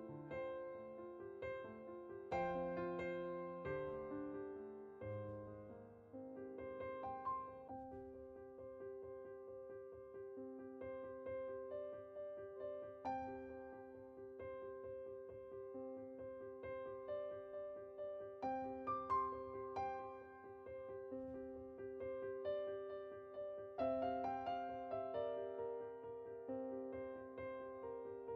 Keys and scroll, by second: 6.5-7.6 typing, 18.1 typing.